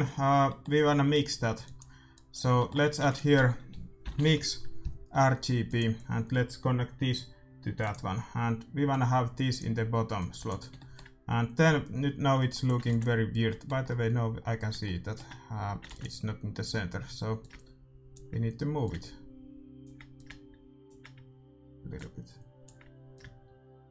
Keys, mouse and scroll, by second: 0.4-1.7 middle drag, 1.1-3.8 drag, 2.9 shift+a, 7.9-11.9 drag, 10.8-12.5 middle drag, 12.5-14.3 drag, 12.8 ctrl+s, 13.4-14.5 middle drag, 16.0 ctrl+s, 16.0-17.4 middle drag, 17.4-23.9 drag.